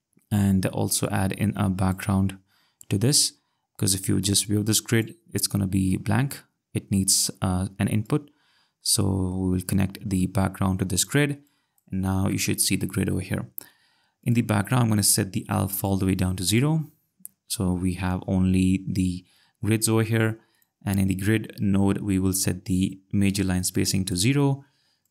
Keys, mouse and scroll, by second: 0.5 i, 0.6 d, 0.9 Return, 3.9 click, 8.0 click, 14.2 click, 15.8 click, 20.5 click, 23.8 click, 25.0 click.